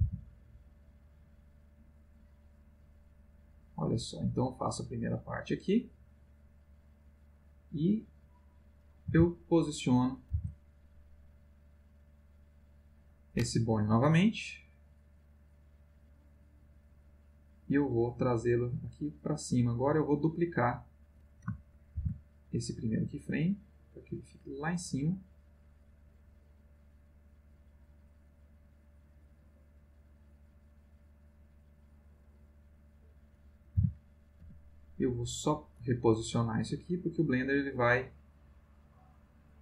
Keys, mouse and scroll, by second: 0.0 g, 1.0 click, 2.1-8.6 drag, 9.1 g, 10.0 click, 10.3 r, 12.4 click, 14.0 click, 15.7-20.0 drag, 20.8 click, 21.9 shift+d, 24.4 click, 25.1-32.9 drag, 33.7 g, 34.4 z, 35.3 click, 36.6-39.6 drag.